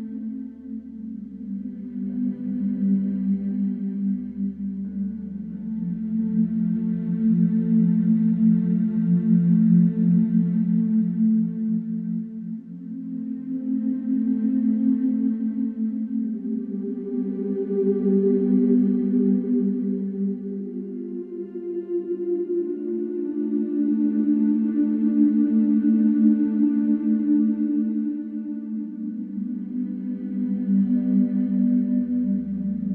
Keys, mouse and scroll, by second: 1.2 Delete, 2.2 F3, 3.0 middle click, 4.8 t, 5.2 z, 5.5 F3, 5.9 middle click, 6.4 click, 11.9 click, 15.1 click, 17.6 click, 19.4 click, 20.5 right click, 21.9 right click, 23.1 click, 24.0 right click, 26.1 click, 26.5 right click, 28.7 click, 29.9 click, 32.1 click.